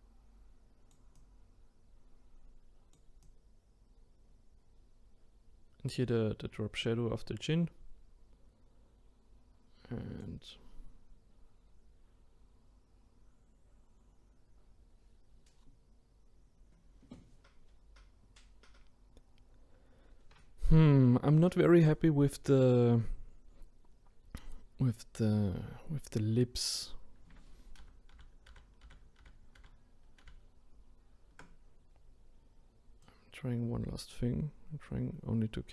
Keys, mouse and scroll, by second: 27.8 ctrl+z, 28.1 ctrl+z, 28.8 ctrl+z, 29.2 ctrl+z, 33.0-35.7 drag.